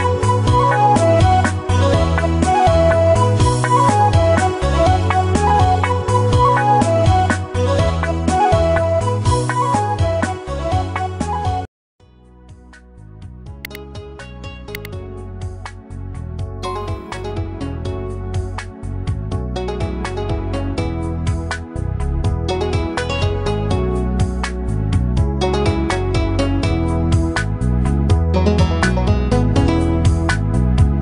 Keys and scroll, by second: 23.2 Delete, 25.2 ctrl+d.